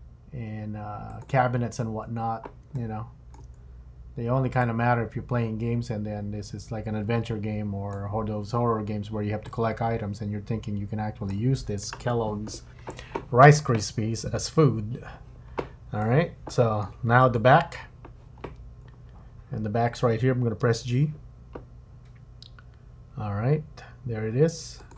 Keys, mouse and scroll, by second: 1.5-2.6 scroll up 4, 2.8 shift+middle click, 3.6-4.6 scroll down 1, 4.6 click, 9.4 click, 14.5-16.0 scroll down 4, 16.0 middle click, 17.2 click, 18.8 scroll down 2, 20.6 g.